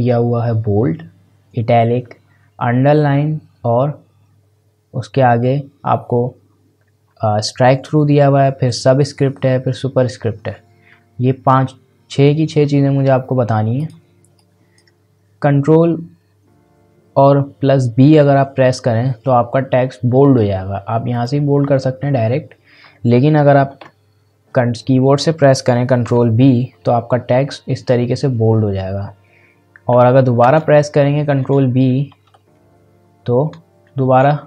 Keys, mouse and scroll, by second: 13.7-17.1 drag, 21.1 click, 23.8 ctrl+z, 26.0 ctrl+b, 29.9 ctrl+b, 30.4 ctrl+v, 31.4 ctrl+c, 32.4 ctrl+b.